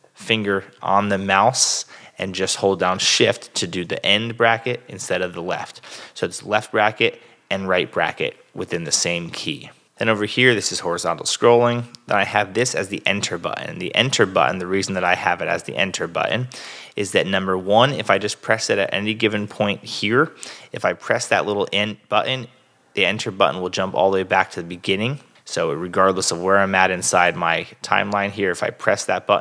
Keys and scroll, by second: 0.8 shift+super+[, 1.0 shift+super+z, 1.5 super+z, 3.3 shift+[, 4.0 shift+super+[, 4.1 shift+super+z, 4.9 super+z, 5.4 [, 5.8 super+z, 9.0 super+Tab, 15.8 Return, 22.8 Return, 28.9 Return.